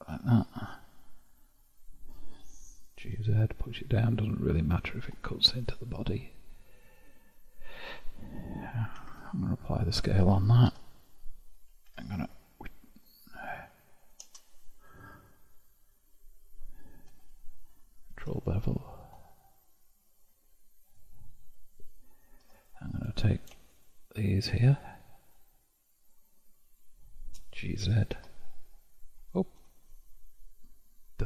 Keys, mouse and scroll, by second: 0.7-3.1 middle drag, 3.1 g, 5.5-8.3 middle drag, 9.1 ctrl+a, 10.8 Tab, 11.9 ctrl+r, 15.3-16.1 scroll up 3, 16.1-17.1 scroll up 1, 17.1 scroll up 1, 17.2 2, 18.3 ctrl+b, 22.7-24.7 drag, 25.3 shift+click, 26.1 shift+click, 26.7 shift+click, 28.0 g.